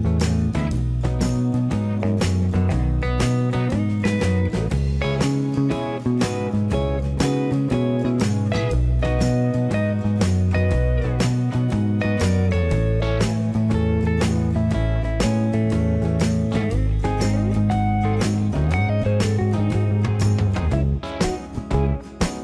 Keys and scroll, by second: 0.0 Escape, 0.7 space, 1.9 Escape, 7.2 shift+x, 9.7 Escape.